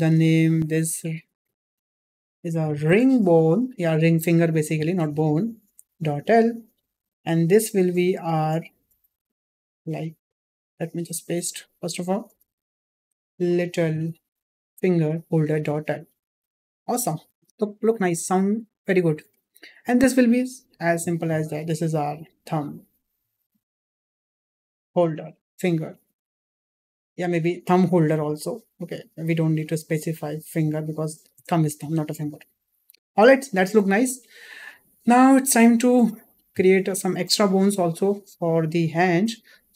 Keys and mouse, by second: 6.9 click, 8.1-15.8 drag, 13.7 t, 17.7 shift+middle drag, 19.3 shift+middle drag, 20.6-26.0 drag, 28.5-34.4 drag, 35.7 shift+middle drag, 36.4 click.